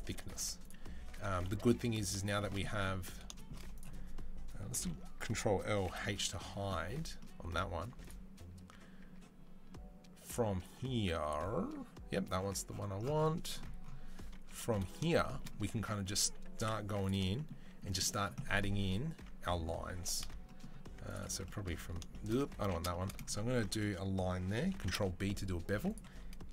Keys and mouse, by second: 0.2 z, 0.8 a, 1.2 KP_3, 3.6-4.6 ctrl+middle drag, 4.6 ctrl+l, 5.7 h, 7.8 Tab, 7.8 click, 8.4 Tab, 8.8 Tab, 10.1 click, 14.3 KP_3, 14.8 shift+middle click, 15.6 Tab, 16.4 2, 16.8 alt+click, 17.1-26.5 shift+middle drag, 22.4 ctrl+z, 24.5 ctrl+b.